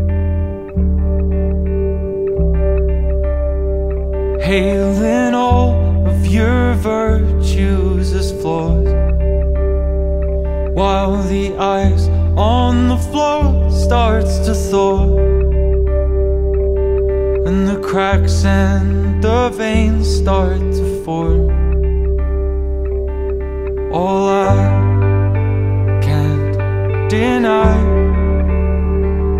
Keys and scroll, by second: 0.4 super+-, 1.0 super+-, 1.7 super+=, 2.2 super+z, 3.8 super+-, 4.3 super+-, 4.6 super+-, 5.1 super+z, 6.4 super+=, 6.8 super+-, 7.3 super+-, 7.6 super+-, 8.4 super+-, 9.0 super+-, 9.4 super+=, 9.8 super+z, 10.5 super+-, 12.1 super+-, 12.9 super+-, 14.5 super+-, 15.3 super+-, 15.6 super+=, 16.7 super+-, 17.0 super+z, 17.5 super+-, 17.6 super+=, 18.0 super+-, 18.5 super+-, 18.7 super+=, 19.1 super+=, 19.6 super+=, 19.8 super+=, 21.7 super+z, 24.1 super+=, 25.9 super+=, 26.5 super+=, 28.7 super+-, 28.8 super+=, 29.1 super+-.